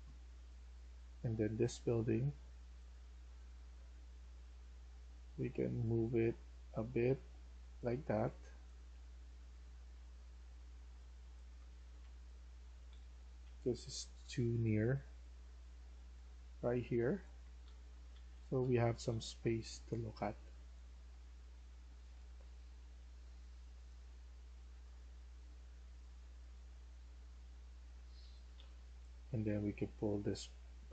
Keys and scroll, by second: 2.9-3.6 typing, 7.3 a, 8.0-8.8 a, 10.6-14.3 typing, 16.1-19.3 typing, 20.5 d, 22.7 a, 27.9-29.0 typing.